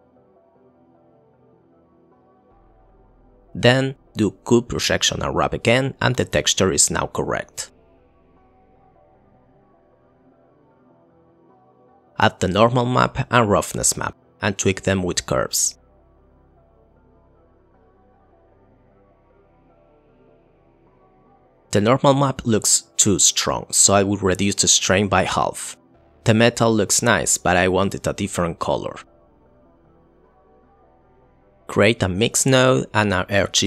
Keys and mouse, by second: 0.1 click, 1.0 middle click, 2.1 click, 3.3-3.7 drag, 4.4 click, 4.7 click, 5.4 click, 9.7 KP_0, 10.6 click, 10.8 click, 11.0 click, 12.9 click, 13.4-14.7 drag, 15.0 click, 16.2 middle drag, 17.5 click, 17.7 click, 17.9 click, 18.1 click, 18.7 click, 19.0 click, 19.4 click, 19.5 shift+a, 19.6 Down, 19.9 click, 21.0 click, 21.4 click, 22.3 click, 24.7-25.7 middle drag, 29.3 click, 30.0 click, 30.5 click, 30.9 click, 31.3 click, 31.4 Delete, 31.7 shift+a, 32.6 click, 32.8 shift+a.